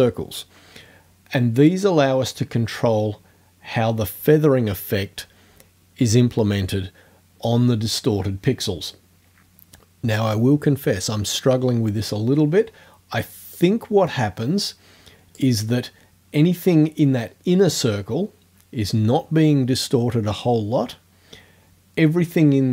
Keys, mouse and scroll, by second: 13.6-15.6 drag.